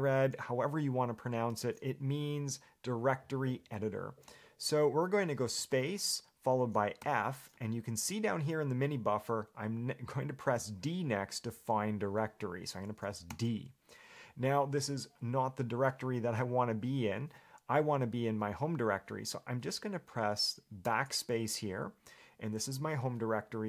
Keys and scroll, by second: 21.1 BackSpace.